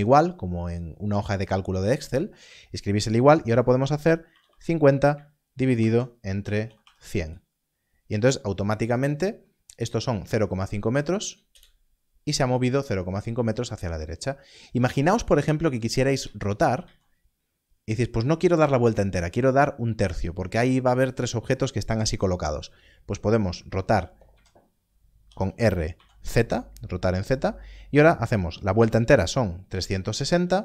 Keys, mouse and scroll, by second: 4.2 BackSpace, 5.7 shift+7, 6.6 0, 6.8 0, 11.5 0, 14.4 Return, 15.0-16.2 scroll down 1, 16.2-16.8 scroll down 1, 16.8 z, 24.3 z, 25.2 r, 25.9 z, 28.7 3.